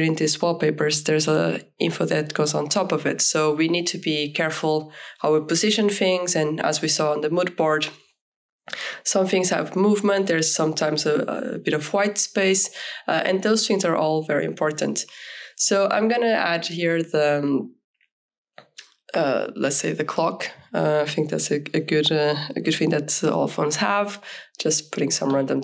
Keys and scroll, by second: 1.0 0, 3.0 shift+], 9.8 2, 10.1 3, 16.3 ctrl+a.